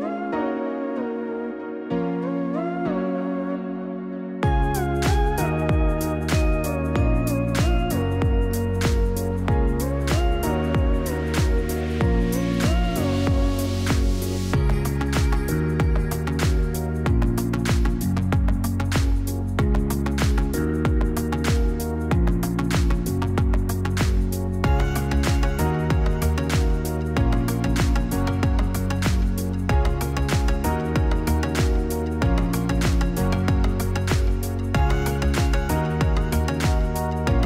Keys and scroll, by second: 6.7 typing, 23.2-24.4 typing, 28.6 0.